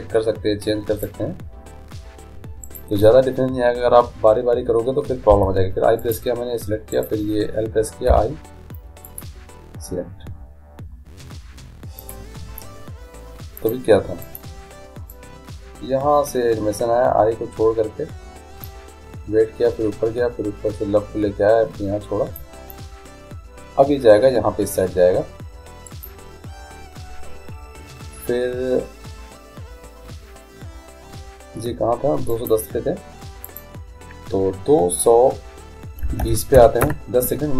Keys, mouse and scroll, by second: 2.7-4.6 right drag, 5.4 i, 7.0-8.9 right drag, 8.2 i, 12.1-17.0 drag, 25.9-27.9 right drag, 32.4-35.5 drag, 36.3 2.